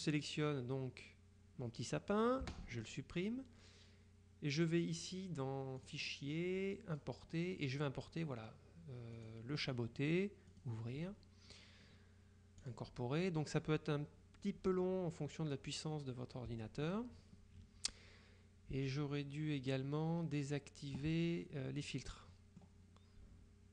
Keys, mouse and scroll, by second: 0.1 click, 2.5 Delete, 5.9 click, 7.0 click, 9.2 click, 10.6 click, 12.8 click, 21.8 click, 22.2 middle click, 22.4 click.